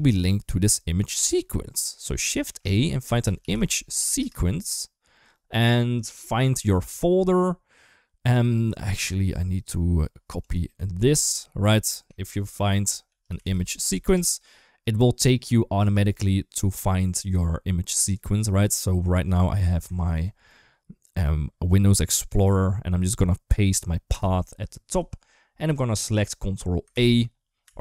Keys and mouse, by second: 2.2 shift+a, 10.3-11.5 drag, 11.9 shift+a.